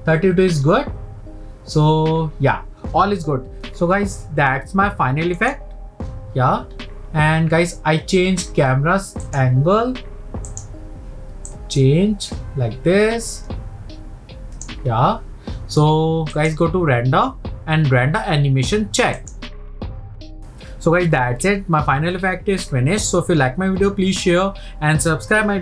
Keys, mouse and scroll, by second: 5.7-6.7 drag, 6.7 scroll down 1, 9.4 click, 11.6-14.5 drag.